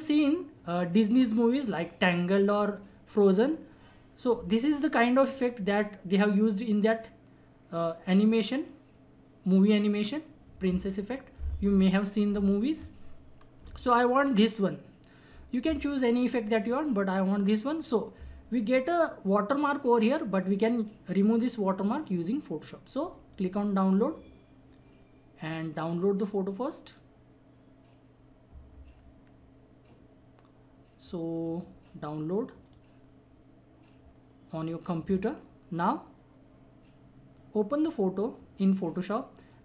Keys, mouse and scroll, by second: 13.4-14.3 scroll up 1, 14.3-16.1 scroll down 1, 23.3 click, 31.3 click, 33.0 click, 35.8-39.6 drag.